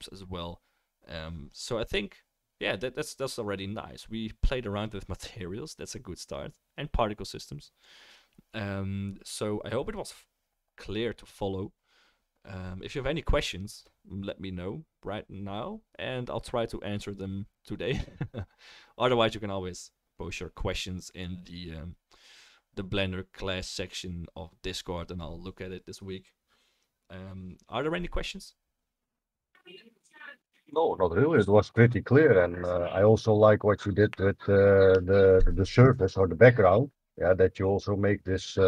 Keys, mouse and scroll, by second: 30.5-38.6 drag, 30.5-38.6 middle drag, 30.5-38.6 right drag.